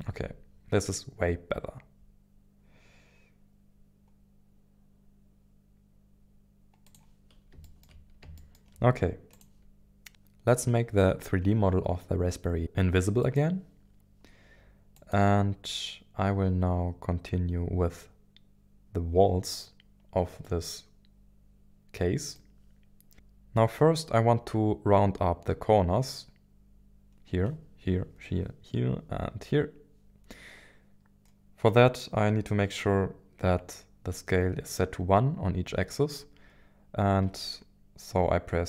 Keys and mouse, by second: 0.0 g, 6.8 click, 7.7 shift+middle click, 8.4 shift+middle click, 9.3 click, 13.2-14.2 drag, 20.4-22.5 middle drag.